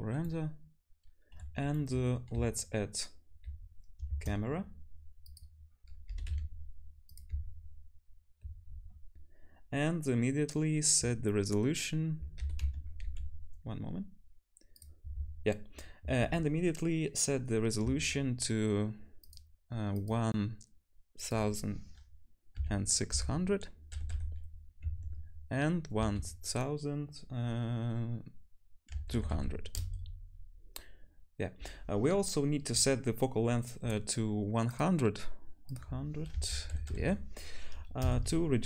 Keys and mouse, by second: 4.1 shift+a, 6.1 g, 7.3 `, 12.4 g, 19.3 click, 19.9 click, 21.3-34.8 drag, 24.1 0, 29.3 0, 34.8-35.8 middle drag, 35.8-38.6 drag, 36.9 0.